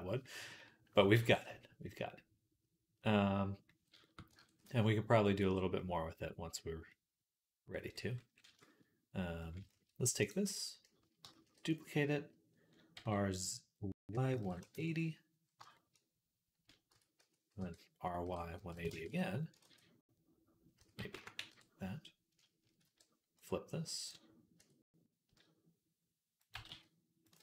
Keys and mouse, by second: 0.1 right click, 1.0 ctrl+s, 1.8 right click, 2.0 right click, 2.2 right click, 2.6-5.4 right drag, 4.3 ctrl+s, 5.6-8.2 drag, 8.2-10.1 shift+middle drag, 10.1 click, 10.1-11.6 right drag, 11.2 shift+d, 11.6-15.6 middle drag, 12.9 r, 16.8 Tab, 17.0 a, 17.4 r, 19.5 ctrl+z, 20.6 s, 22.7 q, 24.4 Tab, 25.1 s, 26.4 g, 27.2 ctrl+z.